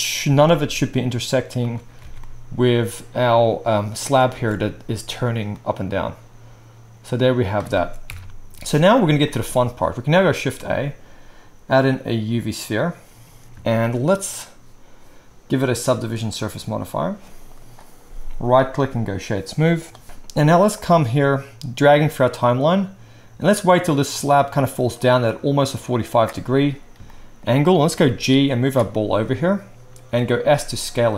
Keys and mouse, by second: 0.2 g, 1.1 right click, 1.8-2.9 alt+drag, 2.1 alt+a, 2.9-13.9 right drag, 4.3 space, 7.7 space, 8.1 KP_1, 10.3 shift+a, 13.9-15.8 drag, 27.0-27.4 shift+drag, 27.0-27.4 shift+right drag, 28.0 g, 28.6 middle click, 28.7-31.1 drag, 30.3 s.